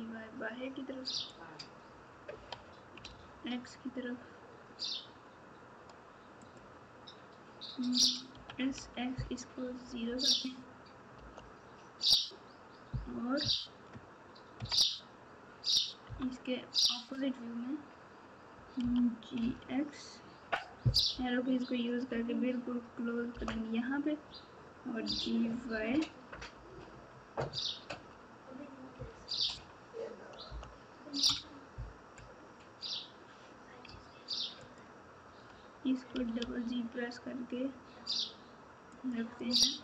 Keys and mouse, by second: 2.3 e, 8.3 s, 13.4 KP_Add, 14.6 KP_Subtract, 18.8 g, 25.0 g, 34.6 alt+click, 36.1 g, 39.3 click.